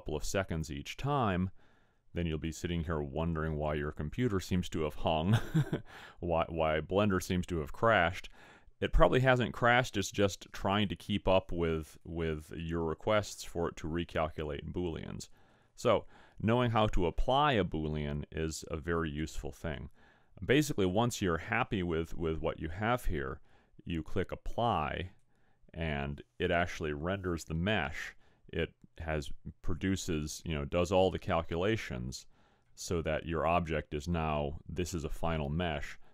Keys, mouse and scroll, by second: 12.1 click, 25.0 click.